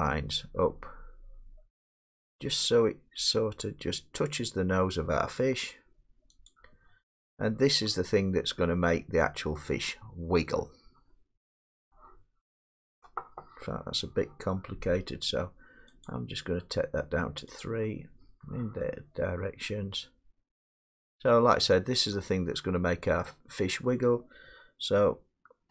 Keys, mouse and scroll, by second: 6.5 click, 7.8-8.4 scroll, 8.4-8.8 scroll, 8.8 middle click, 11.2 scroll up 5, 11.9 middle click, 13.1 middle click, 13.1-13.6 scroll, 16.1 click, 17.6 click, 21.9-22.7 drag, 23.7-25.7 middle drag.